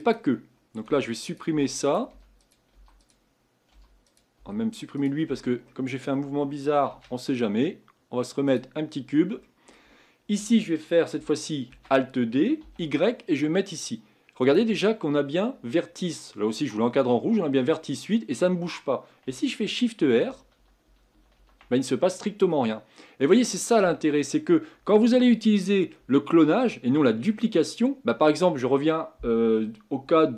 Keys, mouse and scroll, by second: 0.0 click, 0.9 Delete, 1.3 click, 1.5 Delete, 1.9 click, 2.1 Delete, 2.4 click, 2.7 Delete, 3.0 click, 3.7 Delete, 4.1 click, 4.4 Delete, 5.0 click, 5.3 Delete, 5.7-6.9 middle drag, 6.9 shift+a, 9.4-11.7 middle drag, 11.7 alt+d, 20.0-21.4 typing, 22.5-25.6 middle drag.